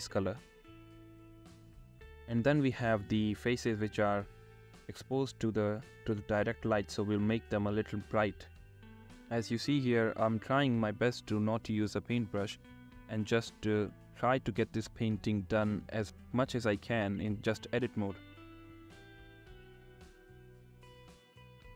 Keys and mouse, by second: 0.5 middle click, 0.9 click, 1.5 click, 3.4 click, 3.9 ctrl+z, 4.7 click, 7.9 click, 9.6 middle click, 10.1 click, 10.6 click, 11.5 shift+click, 12.4 click, 12.9 click, 13.9 middle click, 14.4 shift+click, 14.6 click, 14.9 click, 15.3 click, 15.9 middle click, 16.3 middle click, 16.5-18.3 shift+middle drag, 18.3 drag, 18.4 shift+middle click, 19.6 click, 20.5 click, 21.5 click.